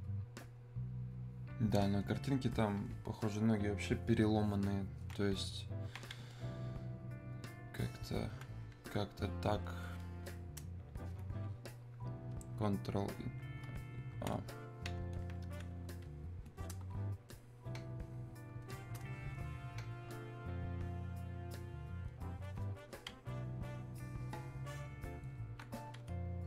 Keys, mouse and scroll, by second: 2.1-5.0 alt+drag, 5.5 alt+click, 6.4-10.4 ctrl+drag, 13.9 ctrl+click, 15.2-17.3 alt+drag, 17.3-26.4 ctrl+shift+drag.